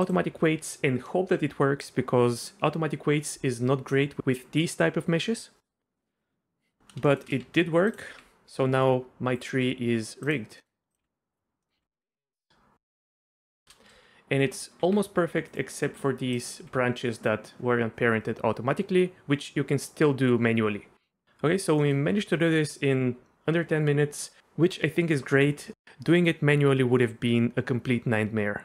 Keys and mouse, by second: 7.1 shift+click, 7.2 shift+middle click, 7.4 Tab, 8.1 r, 9.4 click, 10.6 middle click, 11.0 r, 11.6 middle click, 11.8 r, 13.5 shift+middle drag, 14.8 r, 16.3 click, 16.6 r, 21.8 middle click.